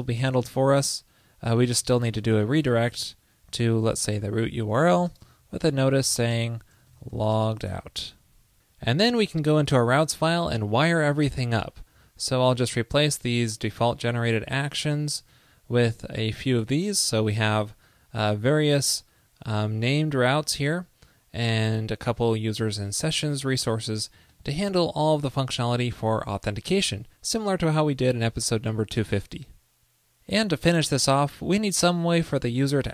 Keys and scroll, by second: 0.2 super+Return, 6.1 ctrl+l, 8.1 super+s, 15.4 super+v, 25.9 super+s.